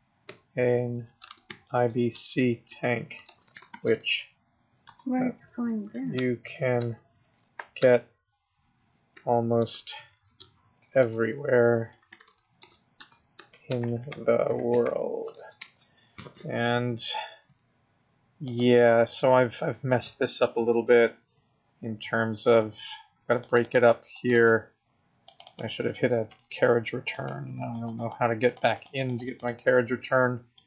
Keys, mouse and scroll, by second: 0.3-3.8 typing, 4.8 Return, 5.7-7.8 typing, 9.1-15.6 typing, 13.0 Return, 18.6 click, 23.5 click, 23.7 click, 24.2 click, 24.4 click, 25.4 click, 25.5 click, 26.3 Return, 27.2 click, 27.8 click, 28.0 click, 28.5 click, 28.7 click, 28.9 click, 29.2 click, 29.3 click, 29.5 click, 29.7 click, 30.0 Return, 30.6 click.